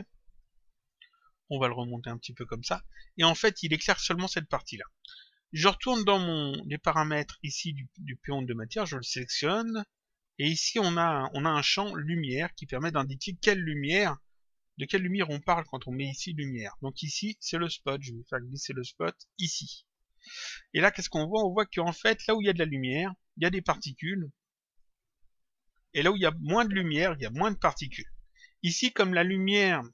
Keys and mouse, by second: 0.2 click, 1.5 click, 6.8 click, 8.9 click, 17.8 click, 23.4 click, 24.6 click.